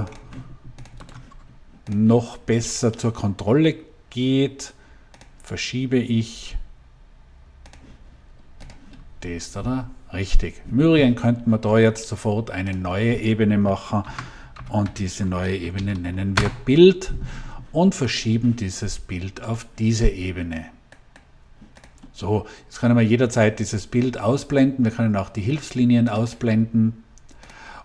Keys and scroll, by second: 13.9 shift+b, 14.5 i, 14.8 l, 15.7 d, 16.2 Return.